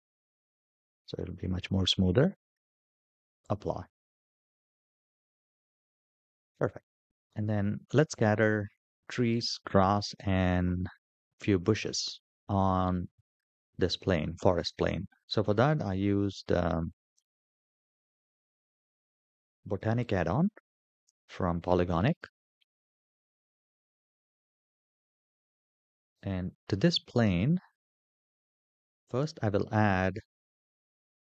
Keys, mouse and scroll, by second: 2.3-3.0 drag, 3.5-6.0 middle drag, 6.5 shift+middle drag, 7.0 middle click, 8.0-8.3 shift+middle drag, 15.8-17.3 scroll down 1, 17.3-19.1 scroll down 7, 19.1 click, 19.1 scroll down 1, 23.3-25.5 scroll down 5, 25.5-27.3 scroll down 1, 28.1-31.2 drag.